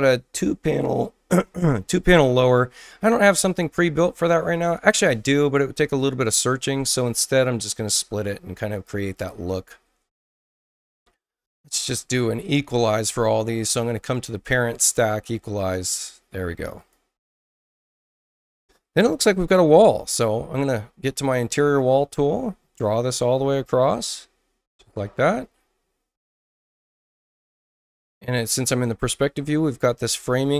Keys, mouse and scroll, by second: 3.2 click, 7.8 click, 9.1 click, 10.5 click, 14.1 click, 15.0 click, 16.7 click, 21.4-24.8 drag, 27.9 click, 30.1-30.5 drag.